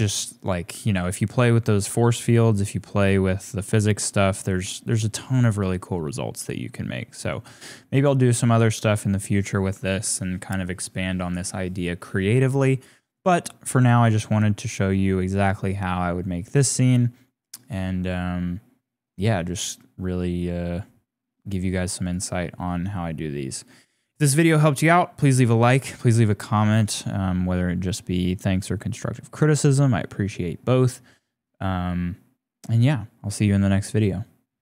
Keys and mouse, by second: 7.3-8.6 drag, 21.5 click.